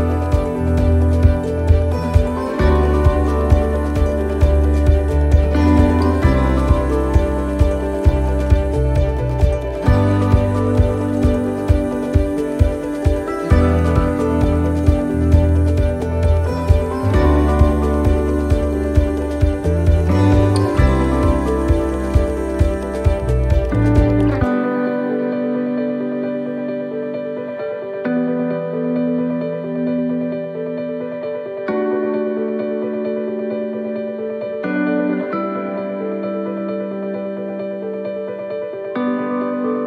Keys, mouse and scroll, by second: 0.5 middle click, 1.9 click, 3.2 middle click, 5.6 click, 6.7 middle click, 9.7 right click, 10.6 l, 12.3 click, 13.8 right click, 14.9 l, 15.9 click, 20.7 click, 22.0 middle click, 22.6-23.7 scroll down 2, 23.0 middle click, 23.7 middle click, 24.7-25.6 scroll up 4, 25.1 middle click, 26.5 shift+middle click, 27.2 middle click, 29.2 click, 30.4 middle click, 34.8 middle click, 35.4 right click, 35.8 middle click, 36.8 shift+right click, 38.8 shift+right click.